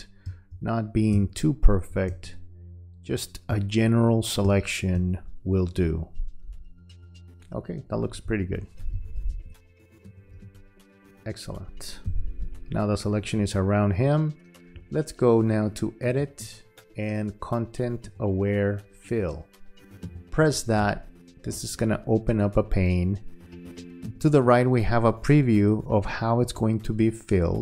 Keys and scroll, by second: 0.2 space, 3.5 space, 4.9 space, 8.1 v, 12.1 q.